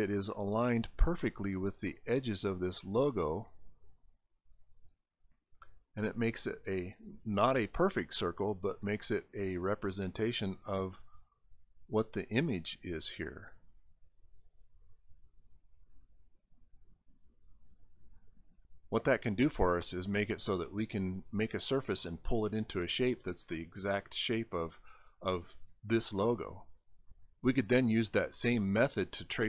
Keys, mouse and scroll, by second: 0.1 scroll down 2, 1.5-3.3 drag, 6.4-7.8 drag, 9.4-11.9 drag, 14.1-15.8 drag, 16.1 scroll up 2, 16.9 scroll up 1, 18.0 click.